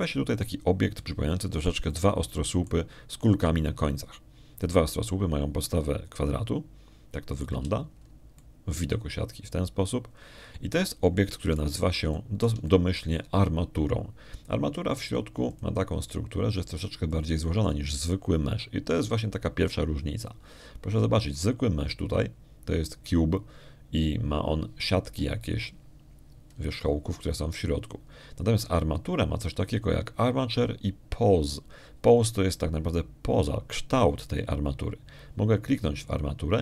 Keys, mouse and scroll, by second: 0.1 click, 1.0 middle click, 2.2-2.5 scroll up 1, 2.8 middle click, 3.0 click, 3.8 middle click, 6.5-9.5 middle drag, 9.4 z, 9.8-10.1 scroll up 1, 10.2-13.2 middle drag, 13.4 scroll down 1, 13.6 scroll up 1, 14.0-15.0 shift+middle drag, 17.4 click, 19.0 click.